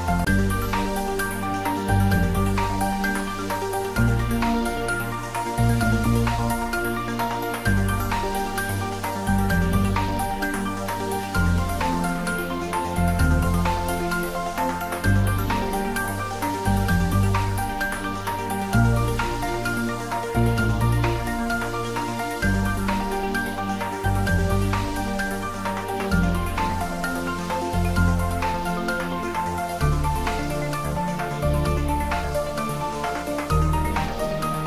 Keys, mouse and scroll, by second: 1.1 scroll down 1, 5.0-7.1 middle drag, 7.1 click.